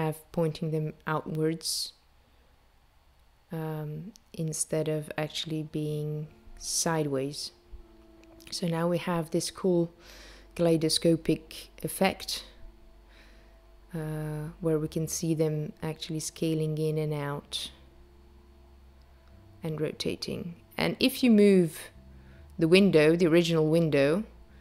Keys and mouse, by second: 7.0 click, 9.0 click, 16.8 click, 17.8 g.